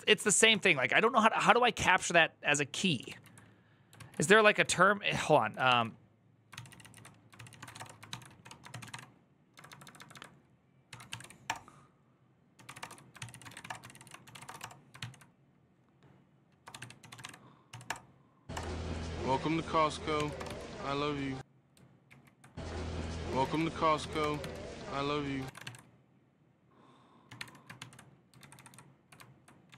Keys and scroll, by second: 0.2 ctrl+c, 1.2 j, 3.8 alt+{, 4.4 q, 5.4 ctrl+f, 6.3 ctrl+c, 6.4 ctrl+c, 6.7 ctrl+c, 7.2-14.8 typing, 16.2-18.3 typing, 19.9-20.7 typing, 21.8 ctrl+o, 21.8 typing, 22.9-25.4 typing, 25.2 ctrl+a, 26.9-27.6 typing, 28.2 ctrl+Left, 29.5 Right, 29.7 Right.